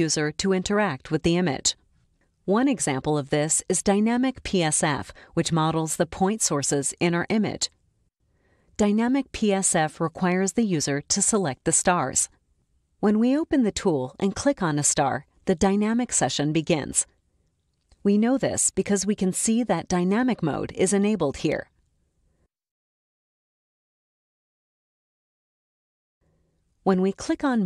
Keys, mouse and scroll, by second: 3.8 click, 7.3-8.1 drag, 14.4 click, 24.3-25.3 drag, 27.1 click.